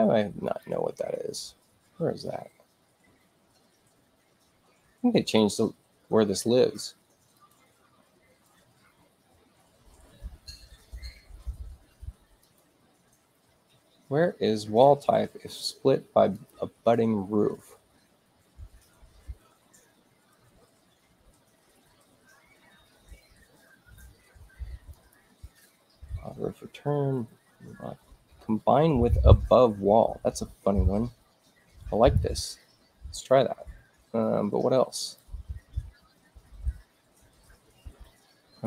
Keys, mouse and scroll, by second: 0.4 click, 7.3 click, 12.3 click, 16.3 click, 24.8 click, 31.9 click, 34.9 click.